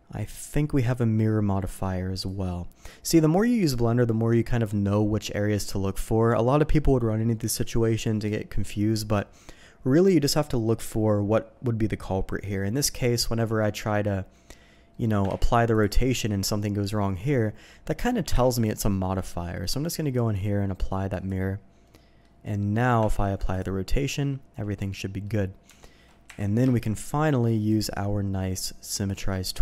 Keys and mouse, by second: 2.3-3.7 drag, 14.9 click, 15.5 ctrl+a, 18.5 ctrl+z, 20.1-21.4 drag, 21.8-22.3 drag, 23.0 ctrl+a, 24.0 drag, 24.9-25.2 drag, 25.6 Tab, 26.2 KP_7, 26.6 a, 27.7-29.1 drag.